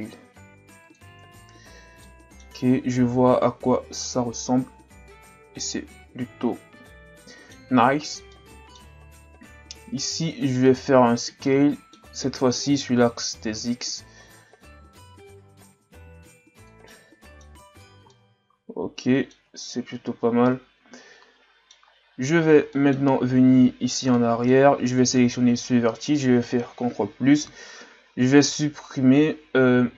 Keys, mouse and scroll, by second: 1.2 Tab, 1.7 scroll down 1, 2.0-2.6 middle drag, 2.6-3.6 scroll up 2, 3.6-5.7 scroll up 1, 5.7-7.9 middle drag, 7.9-8.3 scroll up 1, 8.3-9.3 middle drag, 9.3 Tab, 10.4 alt+right click, 11.4-13.1 middle drag, 13.1 s, 16.9 middle click, 17.8-18.1 scroll up 1, 18.1-19.3 middle drag, 19.3 Tab, 19.7 a, 20.1 scroll down 2, 20.4-21.8 middle drag, 21.8-22.7 scroll up 6, 22.7-23.1 middle drag, 23.1 scroll up 1, 23.4 Tab, 24.2 middle click, 25.0 right click, 26.5 ctrl+KP_Add, 29.3 x.